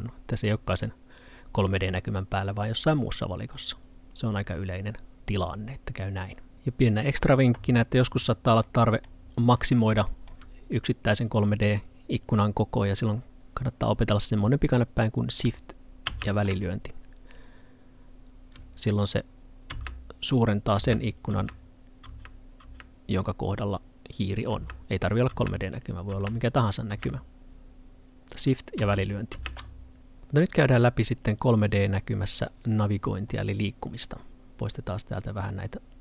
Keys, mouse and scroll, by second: 8.7 middle click, 9.3-10.0 scroll up 1, 10.0 middle click, 16.1 space.